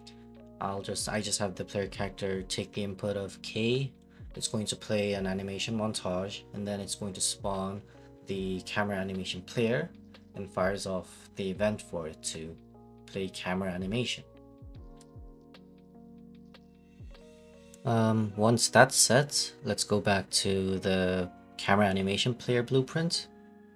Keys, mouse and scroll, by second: 0.0-1.0 typing, 1.0 Return, 1.8 click, 2.1 click, 3.0-4.1 typing, 4.3 click, 5.3 right click, 5.9 click, 6.7-7.7 typing, 8.6 Return, 9.7 click, 9.9 right click, 10.2 click, 11.7 click, 12.0-13.3 typing, 13.0 ctrl+a, 14.2 click, 14.7 right click, 15.4 click, 16.0 click, 16.0-19.1 typing, 17.3 right click, 17.6 click, 17.8 click, 18.2 click, 18.6 click, 19.0 right click.